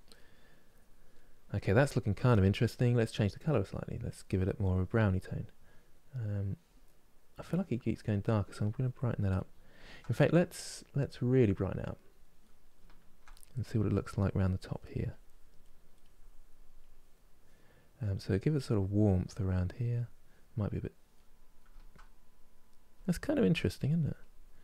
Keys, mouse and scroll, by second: 0.4 click, 0.8-3.3 middle drag, 3.3 click, 4.1 middle click, 4.5-6.9 drag, 6.9 middle click, 7.8-9.0 drag, 9.0-11.0 middle drag, 11.0-12.1 drag, 12.1-13.1 middle drag, 13.1-15.3 drag, 15.3 middle click, 15.7-17.7 drag, 17.7 middle click, 18.1 click, 19.0 middle click, 19.5-20.8 drag, 20.8-23.7 middle drag, 23.7 click.